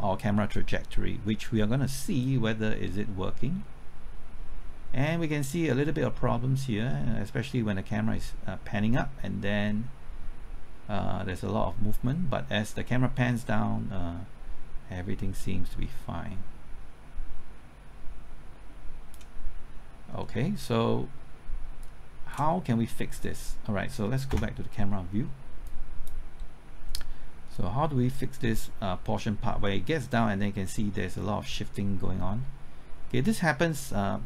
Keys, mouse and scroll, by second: 20.2-21.3 middle drag, 21.8 click, 22.5 scroll up 1, 22.8 middle click, 24.3 KP_0, 25.6-34.2 drag.